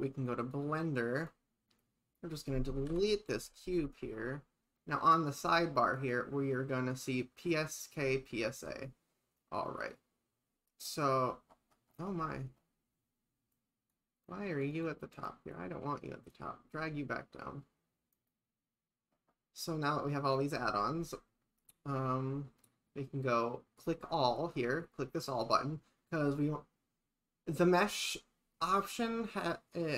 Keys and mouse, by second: 0.4 click, 1.2 click, 2.9 Delete, 6.0 click, 13.5 click, 14.3 drag, 14.8 click, 15.1 click, 15.6-16.3 drag, 18.1 click, 24.0 click, 24.5 click, 27.5 click.